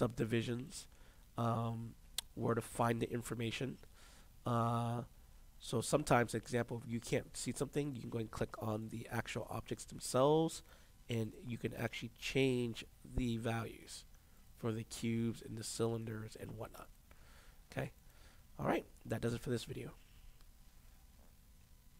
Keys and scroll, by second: 21.9 alt+r.